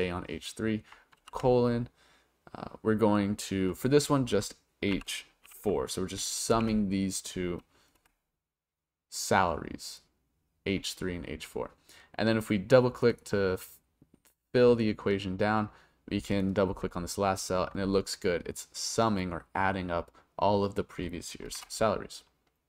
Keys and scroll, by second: 1.2 shift+;, 4.9 shift+h, 5.4 4, 6.5 shift+0, 8.0 Return, 21.5 Return.